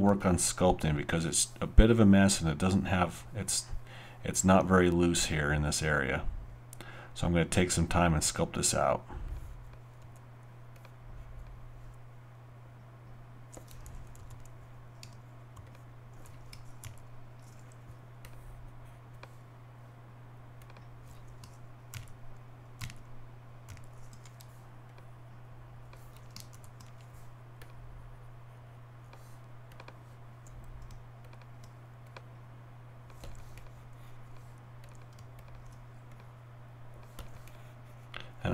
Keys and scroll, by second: 16.8 shift+>, 21.9 shift+>, 22.8 shift+., 23.7 shift+>, 26.5 shift+..